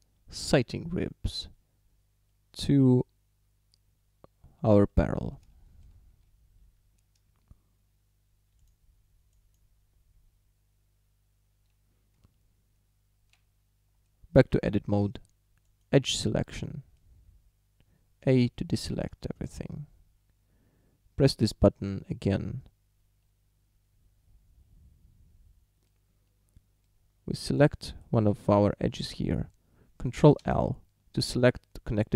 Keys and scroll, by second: 12.2 Tab, 18.3 a, 30.4 ctrl+l.